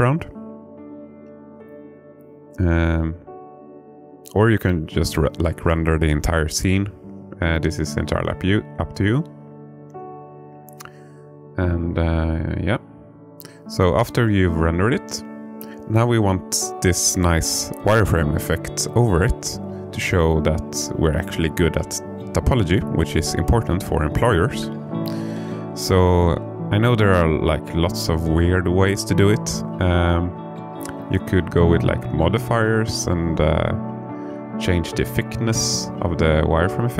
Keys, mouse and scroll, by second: 0.7 click, 3.6 click, 5.6-9.6 drag, 13.1 click, 13.7 click, 15.1-16.1 alt+middle drag, 16.5-18.2 scroll up 3, 18.3 alt+middle click, 20.5 click, 21.4-27.2 drag, 30.2 click, 31.5-35.4 drag, 34.1 BackSpace.